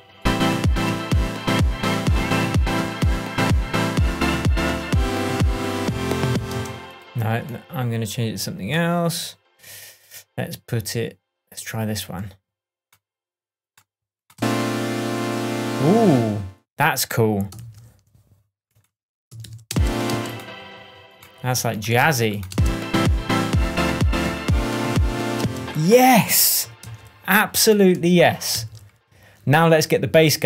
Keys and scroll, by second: 6.4 space, 14.3 space, 16.0 space, 17.5 super+c, 19.3 super+v, 19.6 super+space, 21.9 super+v, 22.4 super+space, 23.2 space, 25.3 space, 26.8 super+v, 28.5 super+v.